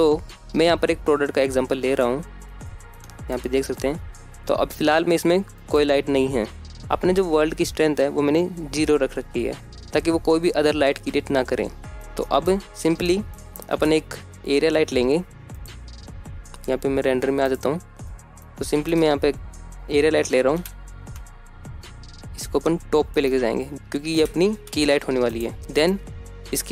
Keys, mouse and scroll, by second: 0.1-2.3 scroll up 1, 5.7-6.1 middle drag, 8.1-8.6 middle drag, 9.0-9.4 shift+middle drag, 9.6 middle click, 10.1 shift+middle click, 10.9-11.2 scroll down 2, 11.0-11.3 shift+middle drag, 11.6 shift+a, 14.4 shift+a, 16.2 click, 16.7 middle click, 17.5 KP_1, 18.1 KP_0, 19.2 g, 19.6 z, 21.8 click, 22.2-22.6 scroll down 2, 22.6-22.9 shift+middle drag, 23.8 g, 24.2 z, 25.0 click.